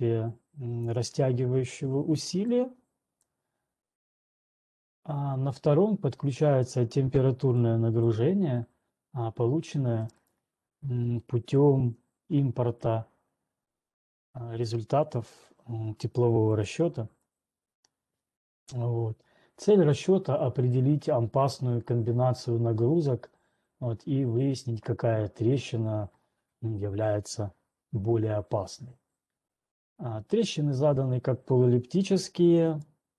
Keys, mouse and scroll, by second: 0.3 scroll, 0.8 click, 1.5 scroll, 3.5 click, 6.5-10.2 scroll, 10.5 click, 17.1 click, 17.5-20.5 scroll, 21.6-22.4 scroll, 23.0-24.2 scroll, 33.1 click.